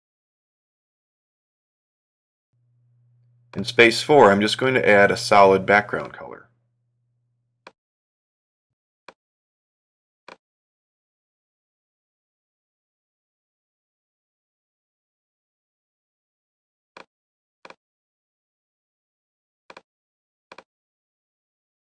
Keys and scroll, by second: 17.9 Right, 20.8 ↙.